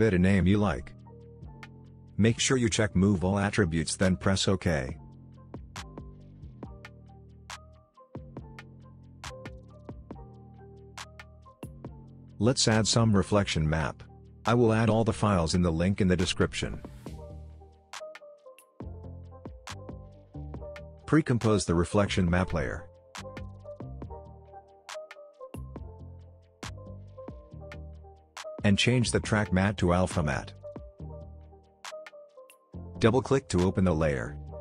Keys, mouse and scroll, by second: 3.1-5.6 drag, 6.3 space, 7.5-12.1 drag, 20.1 click, 20.8 right click, 22.1 click, 25.1 BackSpace, 26.2 click, 28.9 click, 30.7-31.0 scroll up 1, 31.0-31.4 scroll down 1, 31.4 space, 31.4-31.9 click, 31.8 space, 32.5-34.6 drag.